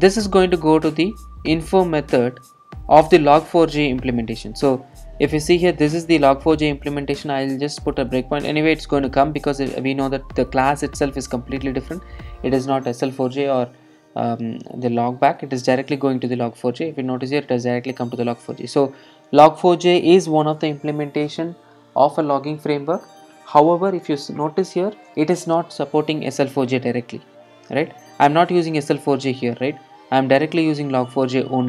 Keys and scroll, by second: 3.4 super+b, 15.6 alt+super+r, 20.3 alt+super+r.